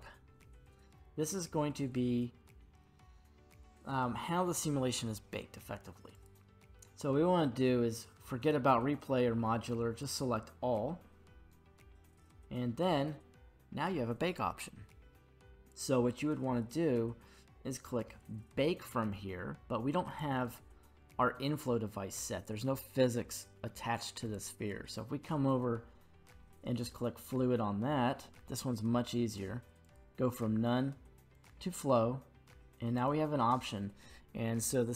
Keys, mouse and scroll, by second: 6.1-10.2 drag, 12.2-15.5 scroll down 1, 20.1 right click, 24.2-27.2 right drag, 24.2 g, 27.2 click, 29.8-31.5 drag, 32.9-34.9 drag.